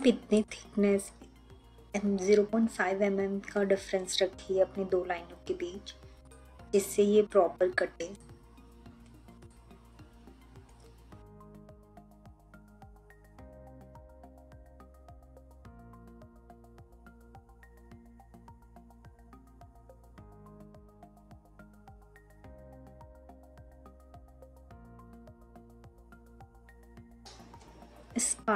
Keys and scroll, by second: 14.2 ctrl+z, 15.2 ctrl+z, 15.5 ctrl+z, 16.0 3, 19.8 3, 21.8 3, 24.7 3.